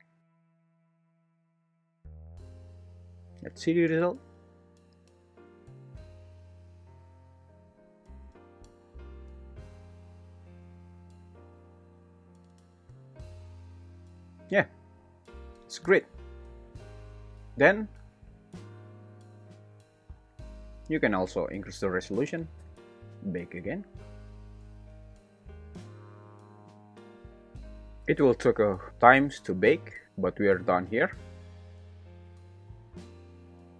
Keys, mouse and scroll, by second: 2.8 click, 3.3 shift+Left, 4.4 alt+z, 4.8 space, 11.0 `, 17.5 space, 18.5 drag, 22.4 click, 22.4 0, 23.4-27.4 drag, 31.2 shift+Left, 31.8 space.